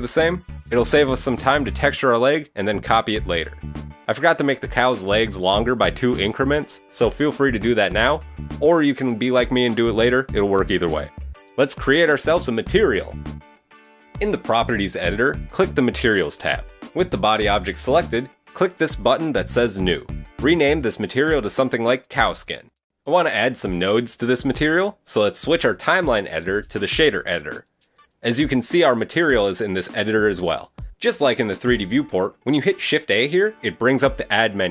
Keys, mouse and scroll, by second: 0.4 scroll up 3, 2.6 g, 4.2-5.6 scroll down 1, 5.6-6.2 scroll down 2, 6.2 middle click, 7.0 shift+middle click, 7.9 middle click, 10.4 click, 10.8 scroll down 2, 11.1 middle click, 12.0 Tab, 12.0 right click, 12.1 Tab, 12.3 right click, 12.5 middle click, 13.6 click, 15.7 click, 19.5 click, 20.2 click, 26.0 click, 27.2-28.0 scroll up 5, 28.0 click, 30.5 click, 31.0-32.0 scroll up 6, 32.0 shift+middle click, 33.0 shift+middle click, 33.2 shift+a.